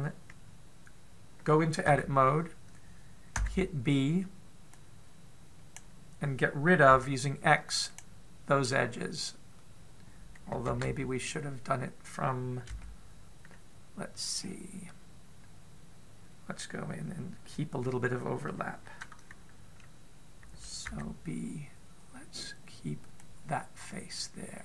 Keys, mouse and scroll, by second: 2.8 Tab, 4.1 b, 8.9 x, 11.6 ctrl+z, 13.4 a, 15.2-16.6 scroll up 2, 16.6-17.0 scroll up 1, 21.6 b.